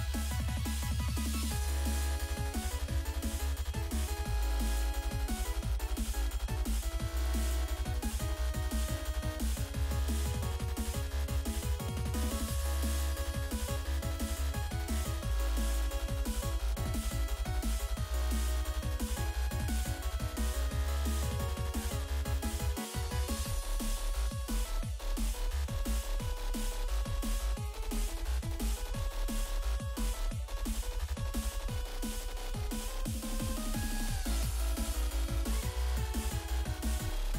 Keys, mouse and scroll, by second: 0.8 click, 2.0 click, 4.0 click, 4.8 click, 5.3-6.2 typing, 6.8 right click, 7.7 click, 8.7 click, 9.4 click, 9.8 scroll down 2, 10.8 click, 11.9 click, 13.2 click, 15.2 click, 16.5 click, 19.0 click, 24.6 click, 26.0 click, 26.6 click, 26.9-27.2 scroll down 2, 28.0-29.0 scroll down 2, 29.0 click, 29.1 click, 30.3 click, 34.7 click, 35.6 F5.